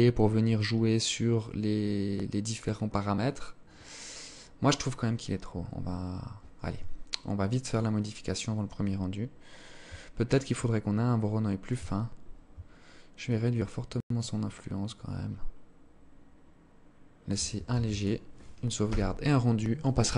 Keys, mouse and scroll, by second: 5.7 Escape, 6.7 click, 9.6 shift+click, 11.1-11.5 scroll up 3, 12.3 shift+click, 16.7 ctrl+s.